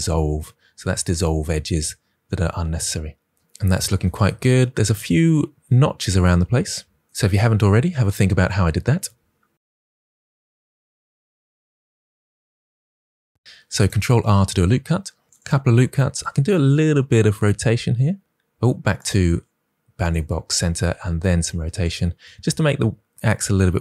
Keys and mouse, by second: 13.7 ctrl+r, 16.1 r, 19.0-20.1 drag, 20.7 r, 21.8 click, 23.5 s.